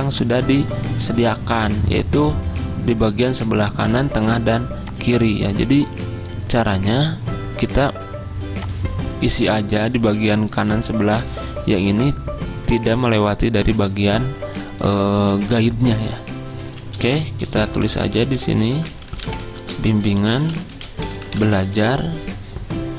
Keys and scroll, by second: 17.6-21.4 typing.